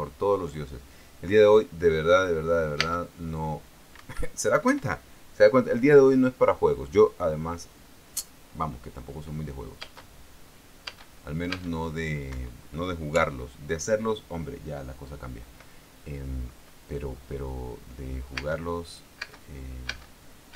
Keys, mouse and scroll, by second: 3.5 space, 4.7 Escape, 5.3 p, 10.5 space, 11.6 space, 12.5 space, 13.0 Escape, 14.2 p, 19.0 space, 19.9 space.